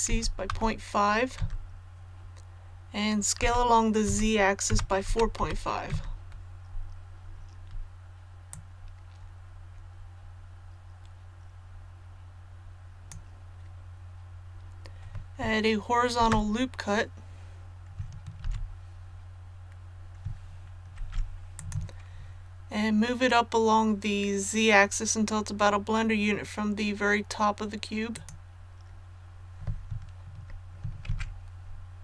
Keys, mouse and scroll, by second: 0.0 KP_Decimal, 0.4 KP_5, 3.3-5.3 typing, 8.4-13.7 drag, 16.1 shift+r, 21.5 click, 31.0 Tab.